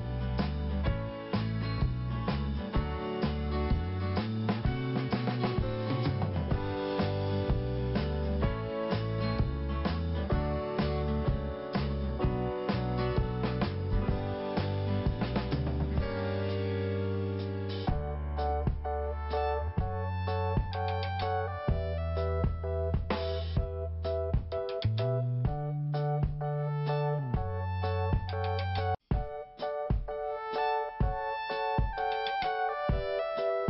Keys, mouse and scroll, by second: 0.7 click, 2.9 scroll down 1, 3.4 scroll up 1, 3.8 click, 4.9 click, 7.3 p, 8.0 scroll down 1, 9.3 click, 11.9 scroll up 1, 12.7 click, 13.1 click, 13.2 double click, 13.6 scroll down 1, 14.2 scroll up 1, 14.6 click, 14.7 click, 15.5 click, 16.7 scroll down 1, 17.1 scroll up 1, 18.0 click, 18.8 scroll down 2, 19.8 5, 21.5 click, 21.7 click, 22.3 click, 22.4 click, 24.6 scroll up 2, 25.5 click, 32.2 click, 33.1 scroll down 1.